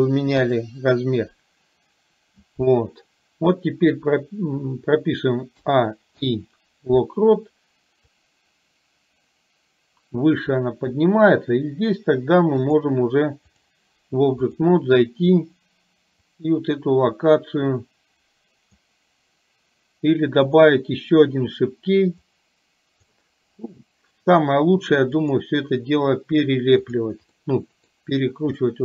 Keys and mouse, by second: 0.5 KP_1, 5.6 a, 6.2 i, 8.1-11.0 drag, 12.9 click, 16.5-18.9 drag, 20.6 click, 22.4 click, 25.5-27.1 drag, 27.4 middle click, 28.6-28.8 middle drag.